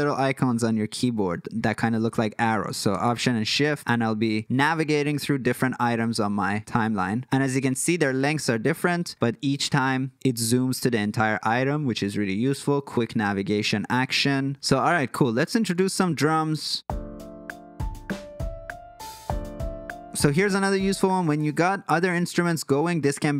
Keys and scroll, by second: 3.2 alt+super+., 3.6 alt+super+., 3.8 alt+super+,, 4.0 alt+super+,, 4.7 alt+., 4.9 alt+., 5.1 alt+., 5.4 alt+., 5.6 alt+., 6.0 alt+,, 6.2 alt+,, 6.5 alt+,, 6.8 alt+,, 7.0 alt+., 7.2 alt+,, 7.8 alt+., 8.3 alt+., 9.9 alt+,, 10.1 alt+,, 10.6 alt+., 10.8 alt+., 11.2 alt+., 12.0 alt+., 14.5 Escape.